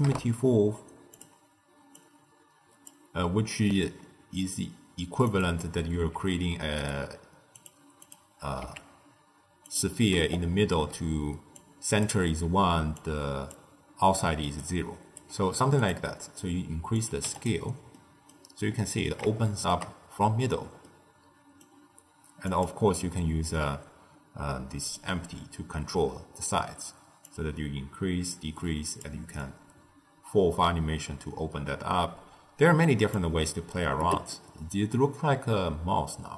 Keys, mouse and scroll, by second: 1.9 drag, 3.6-5.2 middle drag, 5.2 click, 6.0 s, 7.5 click, 8.0 click, 8.5 s, 11.1 d, 11.5 click, 12.0-12.6 d, 12.9 click, 13.5-14.5 d, 14.6 right click, 15.1 d, 15.7 click, 16.9 click, 17.9-22.4 middle drag, 22.4 click, 27.2-32.3 drag, 34.3-36.3 middle drag.